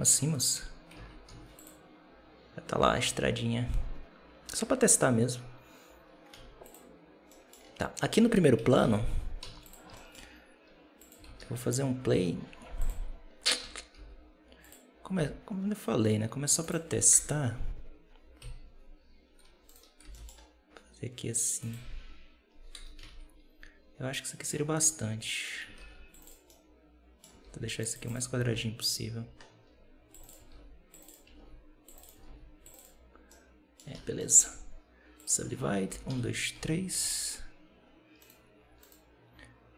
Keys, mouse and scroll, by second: 0.8 alt+a, 1.2 z, 6.2 z, 7.2 middle drag, 7.4 scroll down 3, 8.5 KP_7, 8.6 z, 9.3 z, 9.8-10.9 shift+middle drag, 10.9 click, 11.1 shift+a, 13.1-13.5 scroll down 2, 13.5 Tab, 13.8 s, 15.0 g, 17.0 KP_0, 18.3 KP_7, 19.3 2, 19.5 right click, 19.9 g, 22.6 KP_0, 22.9 z, 24.2 middle click, 24.4-25.1 scroll down 5, 25.1 middle click, 25.7 ctrl+r, 26.4 middle click, 27.3 ctrl+r, 28.4 ctrl+r, 30.4 ctrl+r, 31.2 ctrl+r, 32.1 ctrl+r, 33.0 scroll down 1, 33.2 middle click, 33.8 a, 34.1 middle click, 34.3 w, 35.8 shift+r, 36.0 shift+r, 36.4 shift+r, 36.9 Tab, 38.1-39.7 right drag.